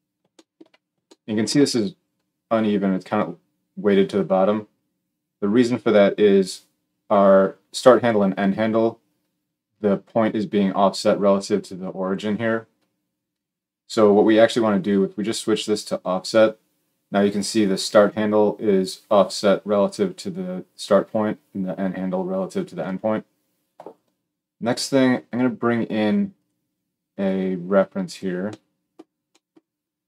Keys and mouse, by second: 15.7-30.0 middle drag.